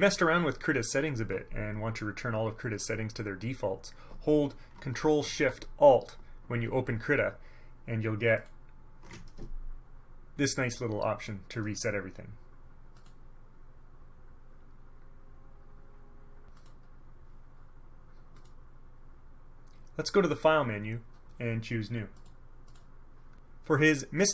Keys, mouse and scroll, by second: 8.5 ctrl+alt+shift+click, 13.1 click, 16.7 click, 18.5 click, 22.3 click, 22.8 click.